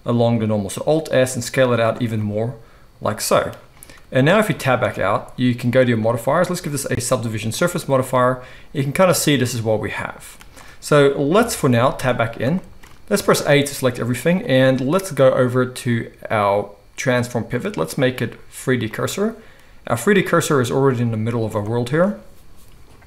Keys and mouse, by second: 1.9-6.6 middle drag, 4.8 Tab, 6.6-23.0 drag, 11.3 KP_1, 11.9 Tab, 13.2 a.